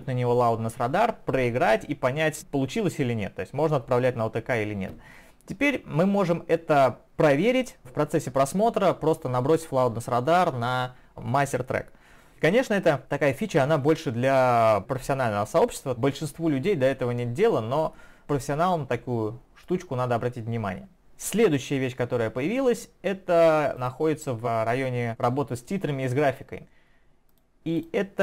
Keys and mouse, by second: 23.8 click, 27.3 click, 27.7 click.